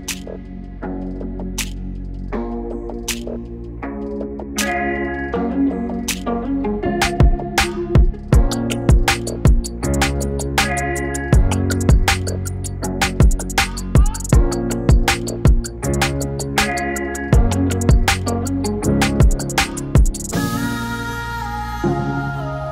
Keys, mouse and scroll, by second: 1.1 shift+click, 3.0 click, 5.5-17.3 drag, 17.3-22.7 drag.